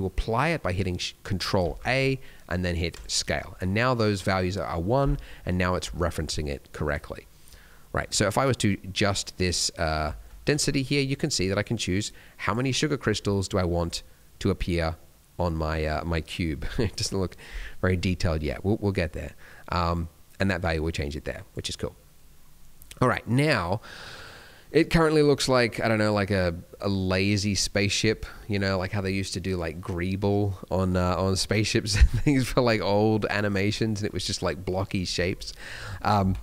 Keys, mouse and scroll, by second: 5.1 n, 5.3 middle click, 5.6 scroll up 1, 5.9 shift+middle click, 6.2 scroll up 2, 6.8 click, 7.2 scroll down 1, 7.5 middle click, 7.7 scroll up 1, 8.4 click, 9.8 scroll down 1, 10.1 shift+middle click, 10.5 alt+a, 10.6 scroll up 1, 10.7 middle click, 12.0 click, 12.8 scroll down 1, 13.0 shift+middle click, 13.2 scroll up 2, 14.1 click, 21.7 scroll down 2, 21.9 middle click, 23.1 middle click, 25.2 click, 26.0 middle click, 26.6 middle click, 32.5-32.9 scroll up 2, 32.9 middle click, 33.7 middle click, 35.5-35.8 scroll down 3.